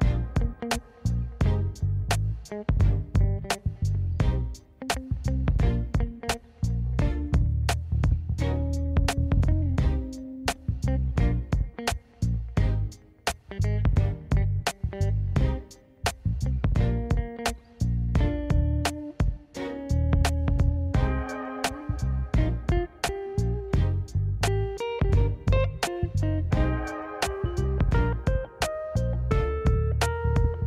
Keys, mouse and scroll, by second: 1.8 click, 9.7 click, 10.0 s, 13.4 scroll down 2, 13.7-14.0 middle drag, 14.4 s, 15.4 middle drag, 16.4 shift+middle drag, 16.8 middle click, 17.9 click, 18.6 shift+middle click, 18.9-19.3 scroll up 2, 19.5 shift+middle drag, 19.7 middle click, 20.1 shift+middle click, 20.7 ctrl+alt+KP_0, 21.8 n, 22.5 click, 22.6-23.0 scroll up 5, 23.0 drag, 23.2 click, 24.1 click, 24.6 click, 24.9-25.8 shift+middle drag, 25.9-26.9 middle drag, 27.7 click, 29.6 n, 29.8 middle click, 30.1-30.5 scroll down 3, 30.3 middle drag.